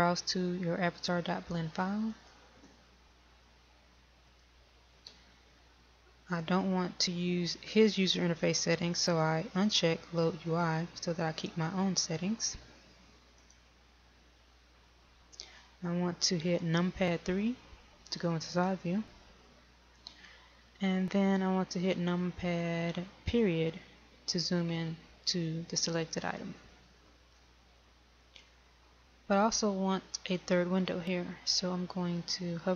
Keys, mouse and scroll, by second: 19.0 KP_3, 25.2 KP_Decimal.